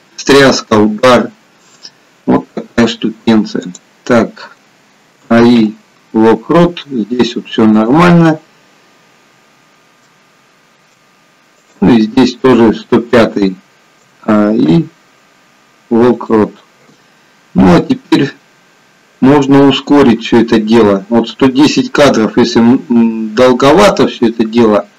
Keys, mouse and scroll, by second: 3.9 click, 5.2 a, 5.8 i, 9.7-10.2 scroll down 3, 10.2 shift+middle click, 12.0 click, 14.1 a, 14.6 a, 17.7 i, 21.1 click.